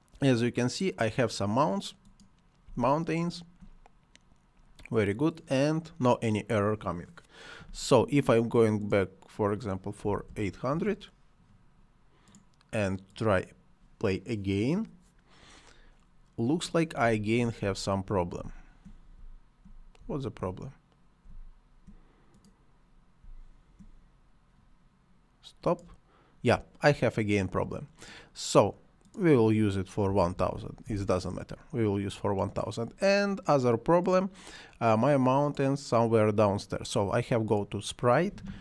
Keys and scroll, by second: 10.0 8, 10.7 Return, 17.1 space, 23.2 space, 29.8-30.7 typing, 30.8 Return.